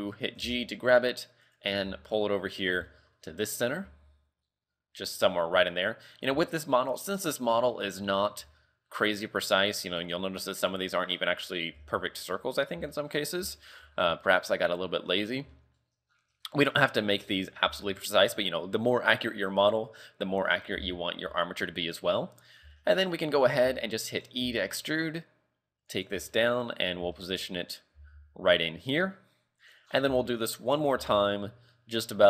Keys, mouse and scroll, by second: 0.4 g, 1.9 g, 2.9 shift+middle click, 3.3 scroll up 5, 3.9 g, 6.6 shift+middle click, 6.8 scroll up 6, 7.7 shift+middle click, 8.4 g, 11.0-12.2 scroll down 8, 11.8 z, 12.2 shift+middle click, 12.7-13.0 scroll down 2, 13.0 shift+middle click, 13.7 shift+middle click, 14.0-14.4 scroll up 5, 15.2 scroll down 3, 15.6 shift+middle click, 16.1-16.6 scroll down 4, 16.6 shift+middle click, 16.9-17.2 scroll up 4, 17.2 z, 17.9 shift+middle click, 18.3 scroll up 2, 21.4 shift+middle click, 21.8-22.4 scroll up 2, 22.4-23.4 scroll down 5, 22.8 shift+middle click, 23.8 shift+middle click, 24.4 e, 26.4 shift+middle click, 26.8 scroll up 6, 27.2 shift+middle click, 27.5-27.8 scroll up 2, 28.0 g, 29.9 scroll down 4, 30.2 shift+middle click, 31.0 e.